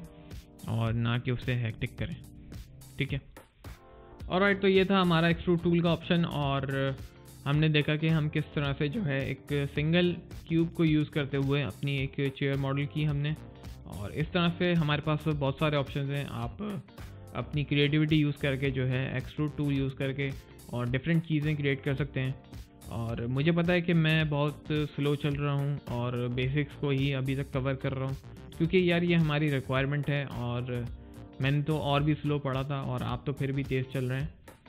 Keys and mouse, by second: 1.1 click, 1.3 middle click, 1.7 click, 2.0 right click, 2.7 alt+middle click, 3.1 alt+click, 3.5 alt+right click.